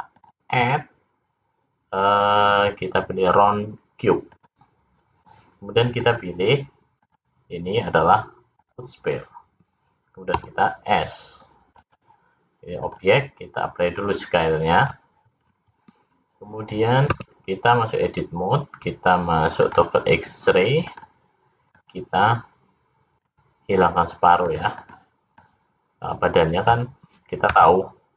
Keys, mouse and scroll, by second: 0.1 click, 6.1 click, 6.9 click, 10.4 s, 12.8 click, 17.3 Tab, 19.6 click, 20.9 click, 21.8 click, 24.6 click, 24.8 click, 25.4 click, 27.5 x.